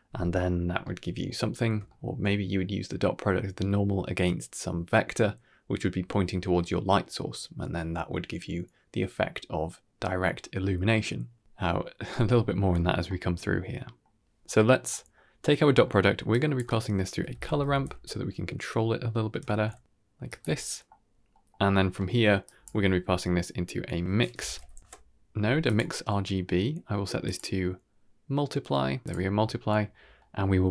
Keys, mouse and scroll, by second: 2.1-2.8 scroll down 2, 2.3-2.8 middle drag, 3.0-3.4 scroll up 3, 3.4 shift+middle drag, 10.9 scroll down 2, 11.2-11.6 middle drag, 12.7-13.8 scroll down 2, 13.0-13.8 middle drag, 14.3 middle click, 14.8 middle click, 15.7 middle click, 16.2-19.5 drag, 19.5 Down, 21.5 middle click, 22.1 middle click, 22.1 scroll down 3, 22.7 middle click, 22.9-23.2 scroll up 2, 23.2 middle click, 23.5 click, 23.5 g, 23.5 x, 25.9-27.1 scroll down 2, 27.1-29.0 drag, 29.5 middle click, 29.8-30.4 scroll down 3, 30.1 middle click.